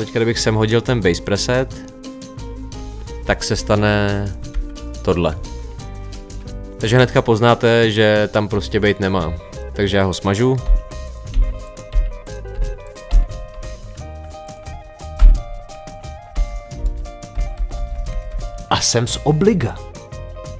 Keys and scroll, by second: 4.5 Right, 10.7 Delete, 15.2 Left, 17.3 Right.